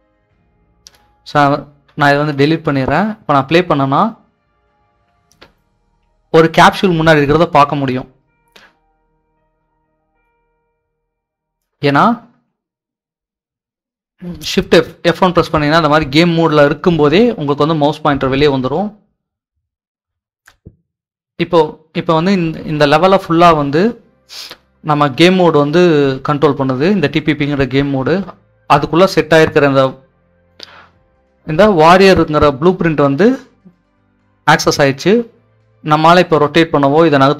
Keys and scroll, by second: 2.1 Delete, 14.3 shift+F1, 37.0 s.